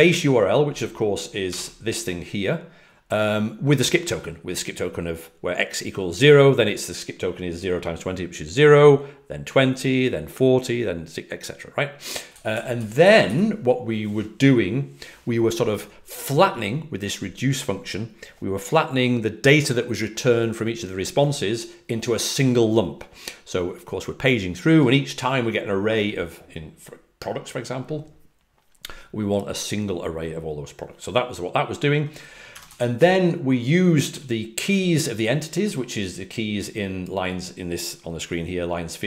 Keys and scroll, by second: 1.1-1.9 typing, 12.0-13.7 typing, 32.4-32.9 typing, 34.0 typing.